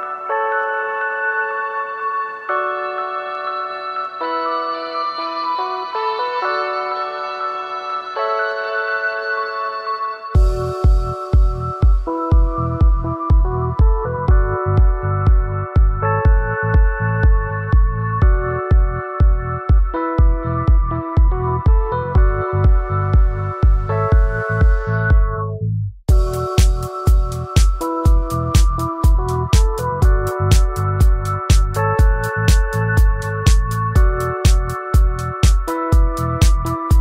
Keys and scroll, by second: 6.5 ctrl+z.